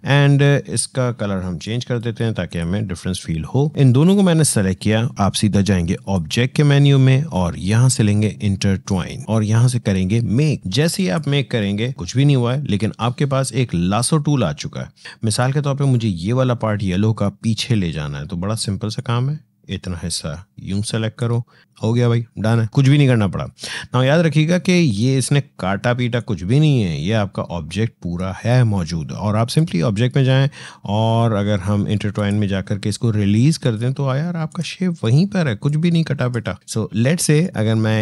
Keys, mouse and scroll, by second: 1.4-5.7 drag, 24.7-29.3 drag, 32.0-37.1 drag, 37.2 click.